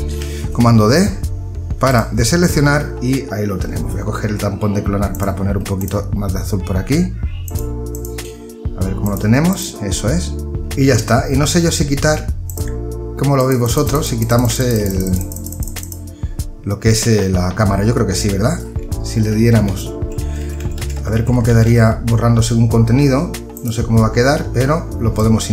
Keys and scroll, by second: 18.7 ctrl+z.